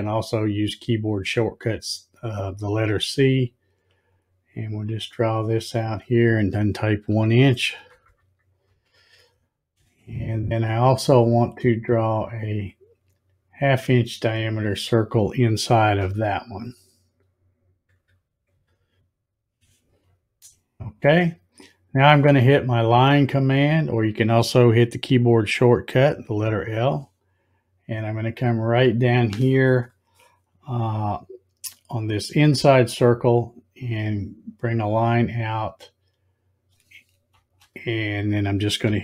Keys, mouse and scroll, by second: 4.1-5.6 drag, 12.7-14.5 drag, 26.5 click, 33.2-37.5 drag, 37.3 space.